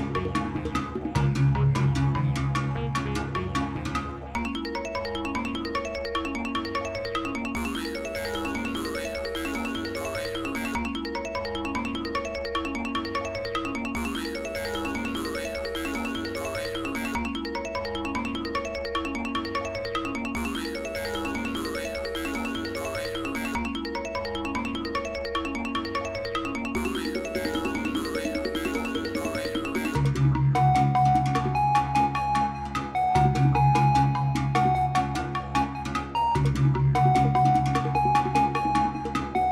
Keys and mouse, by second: 18.0 ctrl+s, 18.4-25.8 drag, 32.8 click.